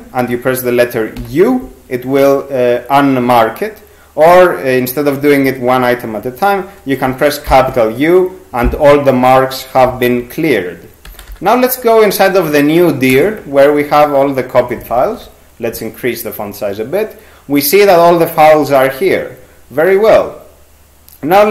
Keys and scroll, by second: 1.2 u, 7.5 shift+u, 11.1 p, 11.4 p, 13.1 Return, 14.8 ctrl+x, 15.0 ctrl+=, 15.2 ctrl+=.